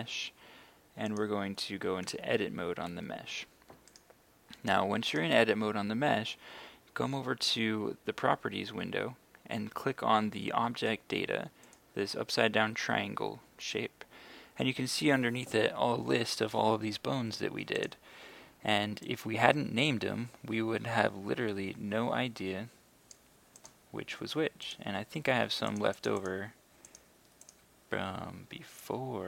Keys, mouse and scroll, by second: 1.1 click, 2.0 Tab, 4.0 right click, 11.7 click, 16.8 scroll down 1, 17.8 click, 18.0-19.1 scroll down 1, 19.1-29.2 drag.